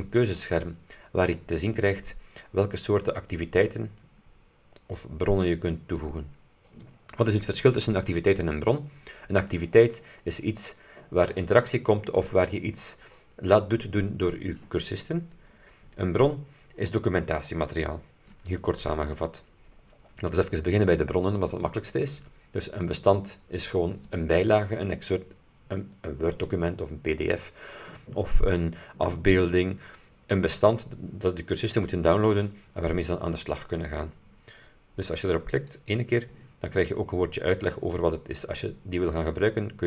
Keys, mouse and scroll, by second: 3.8-4.4 scroll down 2, 4.6 scroll up 2, 5.5-5.9 scroll down 2, 7.0-7.4 scroll up 2, 15.5-15.9 scroll down 2, 16.2-16.5 scroll down 2, 35.7 click.